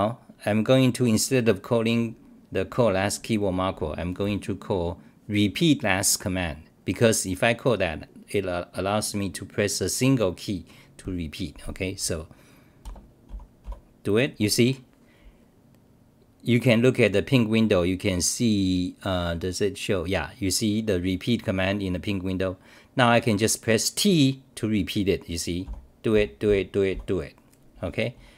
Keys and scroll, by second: 13.4-14.1 typing, 25.4-27.4 typing.